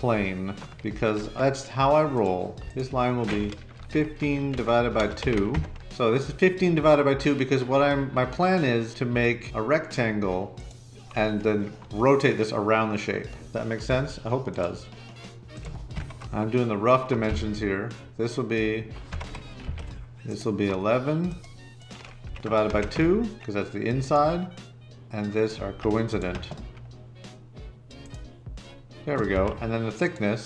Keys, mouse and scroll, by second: 2.6 Escape, 3.5-5.8 typing, 13.8 l, 15.9 Escape, 17.2 d, 19.0 Escape, 19.6 d, 22.0-23.3 typing, 29.3 d.